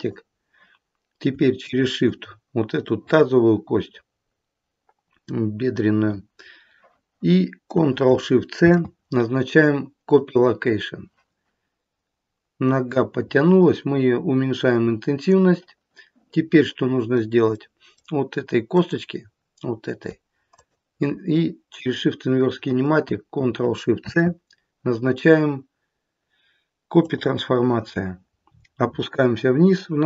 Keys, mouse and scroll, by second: 1.5 shift+click, 8.5 ctrl+shift+c, 12.7 click, 16.4 middle click, 17.5 middle click, 18.7 click, 20.5 shift+click, 23.9 ctrl+shift+c, 28.3-30.0 scroll down 9.